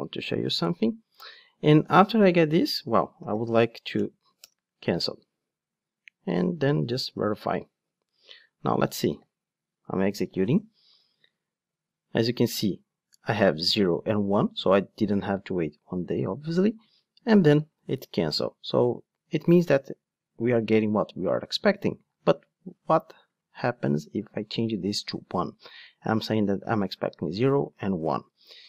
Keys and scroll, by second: 4.4 Return, 8.8 ctrl+shift+d, 28.2 ctrl+shift+d.